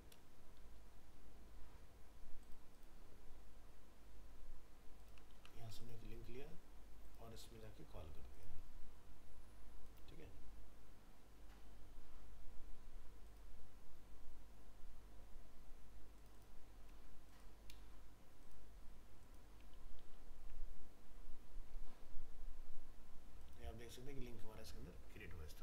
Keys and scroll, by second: 5.4 ctrl+c, 7.5 ctrl+v, 20.0 ctrl+v.